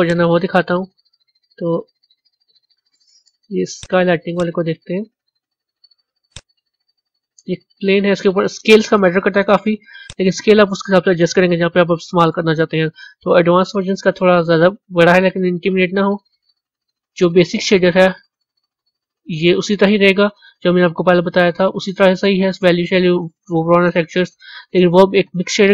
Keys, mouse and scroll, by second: 0.0 click, 3.7 click, 4.4 click, 6.3 click, 7.1-8.2 scroll down 7, 10.0-13.3 drag.